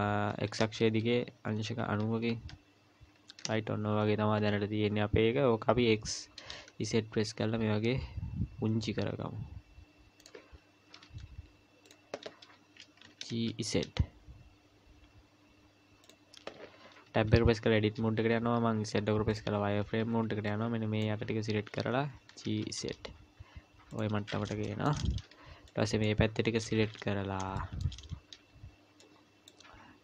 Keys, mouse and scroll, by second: 0.3 r, 5.7 s, 10.9 s, 13.0 g, 17.1 Tab, 18.3 z, 19.8 a, 20.0 a, 22.2 g, 24.6 shift+middle click, 25.1 scroll up 1, 25.7 click, 26.3-27.4 scroll up 2, 27.4 scroll up 1, 27.6 shift+middle click, 29.0 click.